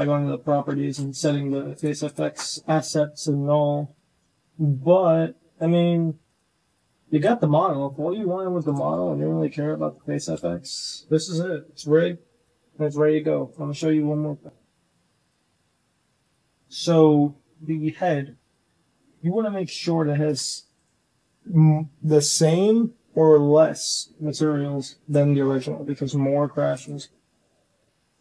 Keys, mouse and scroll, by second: 0.7 shift+drag, 1.7 click, 3.6 click, 3.9 g, 4.5 click, 5.0 g, 6.1-6.6 drag, 7.3 click, 8.0 r, 8.7 r, 12.3-13.5 drag, 15.1 click, 15.9 Tab, 16.1 click, 18.3 click, 18.8 shift+click, 19.8-20.7 drag.